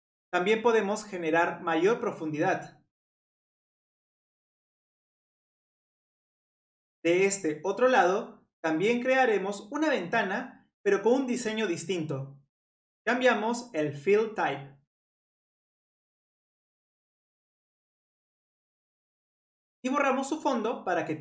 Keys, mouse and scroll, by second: 3.6-5.1 middle drag, 6.3 click, 6.8-9.9 middle drag, 10.1-11.7 drag, 11.7-12.3 middle drag, 12.3 scroll up 1, 12.9-13.5 scroll down 2, 13.5-16.0 drag, 16.1-18.8 drag, 18.8 middle click, 18.9 scroll down 2, 19.2 middle click, 19.9-20.4 scroll up 2, 20.4 click.